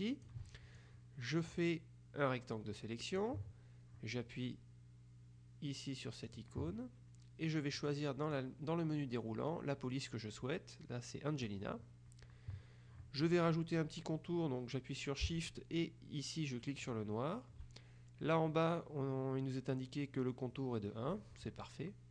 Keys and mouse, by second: 6.4 click, 7.9 click, 17.0 shift+click.